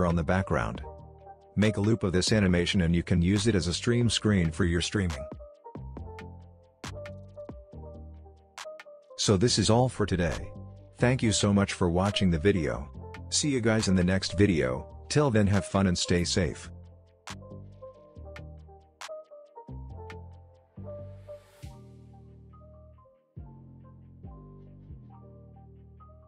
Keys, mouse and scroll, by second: 2.5 space, 3.2-4.3 drag, 12.3 click, 15.9-16.7 click.